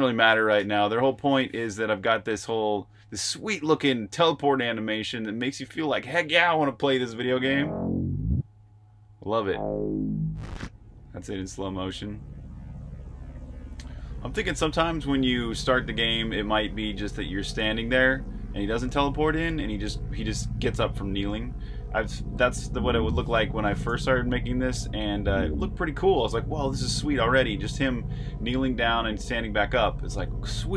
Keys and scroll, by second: 1.0 super+h, 1.0-1.9 typing, 6.9-7.5 typing, 21.5-22.6 typing, 26.0 k.